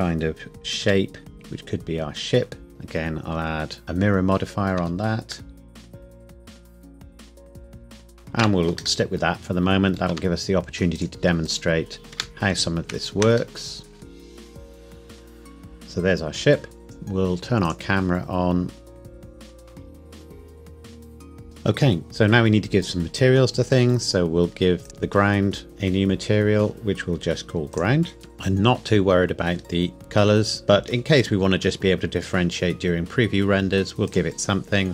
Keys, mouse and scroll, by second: 0.8 s, 1.3 click, 3.8 middle click, 4.8 Tab, 5.5 middle click, 5.7 click, 5.9 shift+click, 6.1 typing, 6.4 scroll up 1, 6.6 click, 6.9 scroll up 1, 7.1 click, 7.2 middle click, 7.5 shift+click, 7.7 g, 7.8 click, 7.9 middle click, 8.2 Tab, 9.0 middle click, 10.1 Tab, 11.0 click, 11.5 shift+click, 12.0 g, 12.1 Escape, 13.0 shift+click, 13.6 middle click, 14.0 g, 14.2 click, 14.8 g, 14.9 click, 15.3 e, 15.5 g, 15.6 click, 15.7 middle click, 16.8 click, 18.3 scroll down 1, 19.0 click, 19.0-20.9 typing, 19.3 click, 19.9 click, 20.4 click, 20.6 click, 21.2 click, 21.4 ctrl+s, 22.8 click, 27.7 click, 28.2-29.6 scroll down 1, 29.6-30.2 scroll up 1, 30.2-30.6 scroll down 1, 30.6-31.6 scroll up 1, 34.1 click.